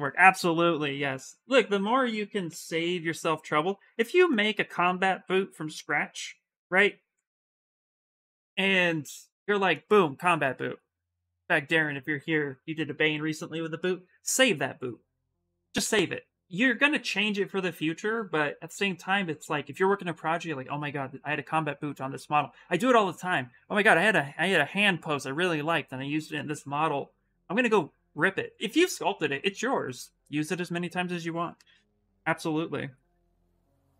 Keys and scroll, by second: 2.0-3.1 typing, 4.4 s.